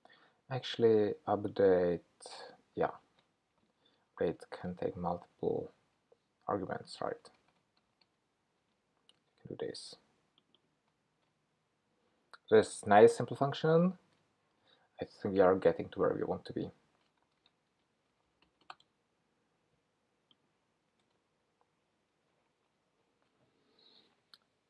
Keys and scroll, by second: 2.9 ctrl+k, 4.6 super+v, 8.7 Return, 11.1 Return, 15.4 super+v.